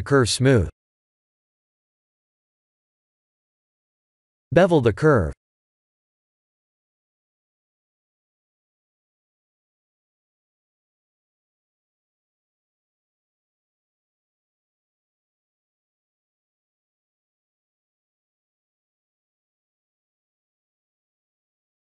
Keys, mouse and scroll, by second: 0.6 scroll down 2, 3.3 Tab, 3.3 click, 3.4 Tab, 3.9 click, 16.3 click, 17.2 scroll down 4, 18.2 click.